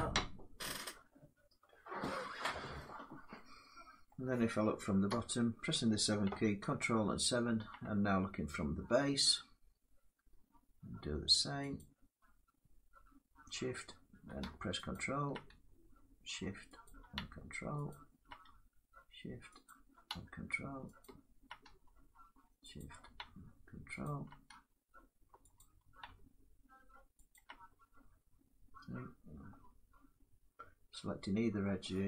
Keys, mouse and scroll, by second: 3.9 middle click, 4.8 7, 6.3 ctrl+7, 6.3-8.9 middle drag, 11.5-12.6 shift+drag, 14.6 ctrl+click, 16.6 shift+click, 17.6 ctrl+click, 19.4 shift+click, 20.7 ctrl+click, 22.5 shift+click, 23.7 ctrl+click, 25.3 shift+click, 27.0 ctrl+click, 31.3 middle click.